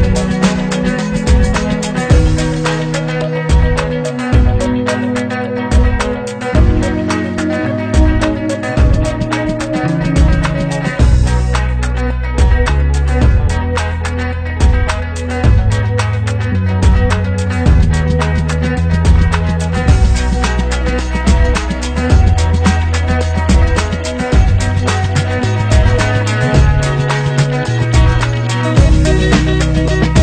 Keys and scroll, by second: 0.9 ctrl+0, 2.2 ctrl+v, 19.8 ctrl+v.